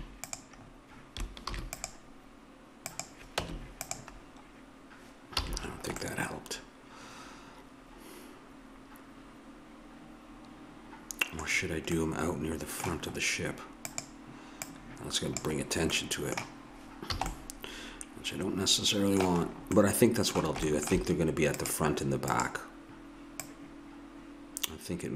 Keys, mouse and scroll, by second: 1.5 ctrl+r, 3.4 Tab, 5.4 a, 13.9-16.5 drag, 17.2 a, 19.1-20.6 middle drag, 21.7-25.1 drag.